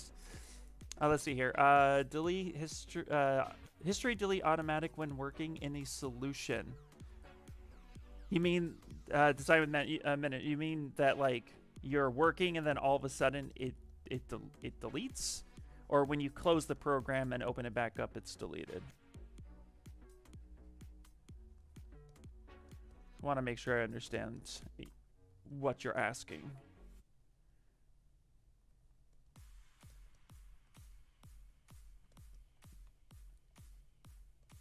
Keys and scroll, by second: 32.5 ctrl+z, 32.7 ctrl+z, 33.0 ctrl+z, 33.4 ctrl+z.